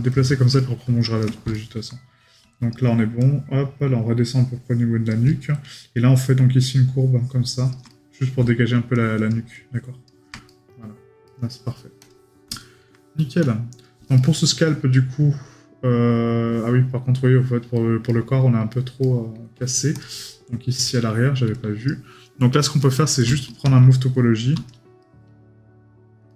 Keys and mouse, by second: 0.6 right click, 7.9 right click, 10.5 right click, 12.6 right click, 14.2 right click, 18.1 right click.